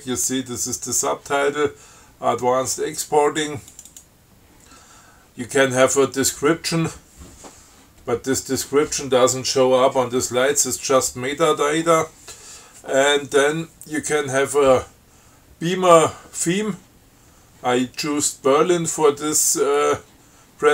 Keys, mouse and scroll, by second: 4.0 click.